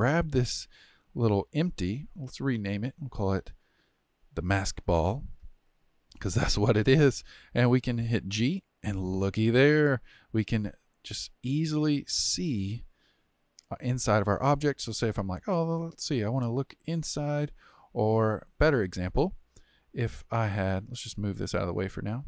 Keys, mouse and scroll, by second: 0.0 click, 2.6 click, 2.8-5.8 drag, 8.2 g, 13.0-14.0 middle drag, 14.0-14.4 scroll up 3, 14.4-15.2 middle drag, 15.2-16.2 scroll up 4, 16.2 scroll up 1, 16.3-17.1 middle drag, 17.1-17.7 scroll down 3, 17.7-18.4 middle drag, 18.4-18.7 scroll down 4, 18.7-20.7 middle drag, 20.7 click, 21.0 g.